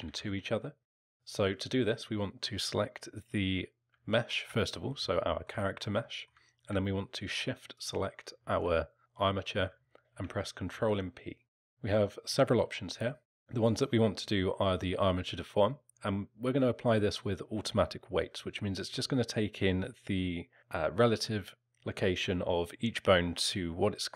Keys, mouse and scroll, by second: 0.0 ctrl+z, 1.1 click, 5.1 alt+middle click, 6.0 alt+middle click, 7.7 shift+click, 9.3 alt+middle click, 10.5 ctrl+p.